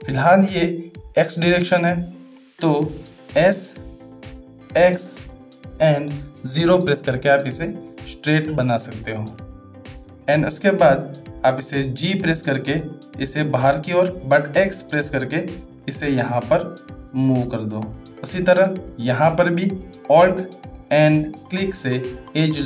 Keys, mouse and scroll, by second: 12.5 g, 18.6 shift+middle click.